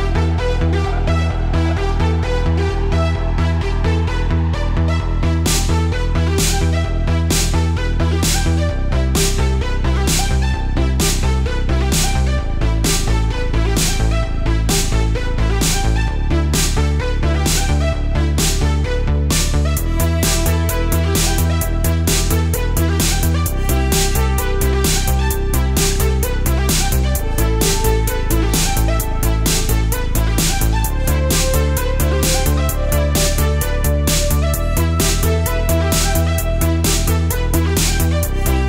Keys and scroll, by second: 0.5 space, 1.3 space, 4.3 alt+super+space, 4.9 super+z, 6.1 space, 6.7 space, 7.3 space, 8.1 space, 9.1 space, 9.6 space, 10.8 space, 12.7 alt+super+space, 13.5 super+z, 13.8 alt+super+space, 15.6 super+z, 16.8 super+z, 17.6 super+z, 17.9 space, 20.3 alt+super+space, 20.5 alt+super+space, 21.4 space, 23.6 alt+super+space, 23.7 alt+super+space, 24.5 super+z, 25.0 super+space, 25.8 space, 26.3 super+z, 26.7 super+z, 27.2-29.1 typing, 31.8 alt+super+space, 32.3 alt+super+space, 32.3 alt+super+space, 33.7 super+space, 35.4 space, 36.0 space, 36.6 space, 37.8 space, 38.5 space.